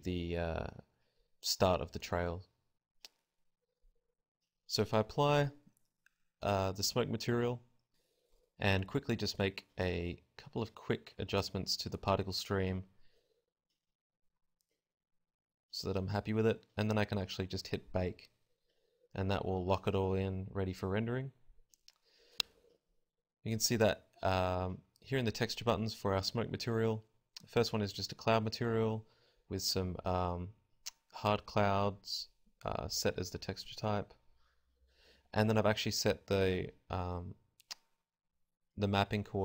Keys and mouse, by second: 0.1 z, 3.8 z, 6.3 click, 7.1-8.7 right drag, 7.8-9.6 drag, 9.6-13.3 right drag, 15.6-18.1 drag.